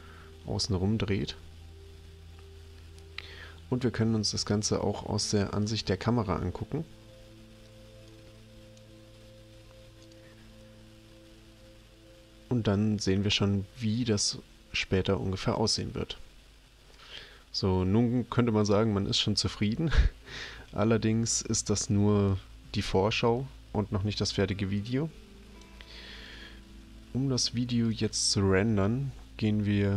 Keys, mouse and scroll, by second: 0.3 middle click, 4.5 click, 5.6 click, 8.1 click, 10.0 click, 24.8 click, 27.9 click.